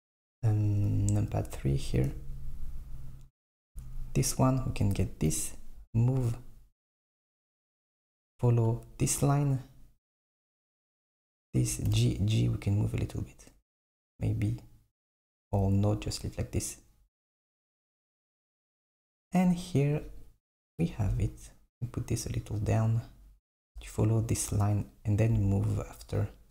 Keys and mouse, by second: 0.9 KP_3, 4.4 click, 5.4 g, 10.9 click, 12.0 g, 20.1 click, 20.8 g, 25.1 click, 26.1 click.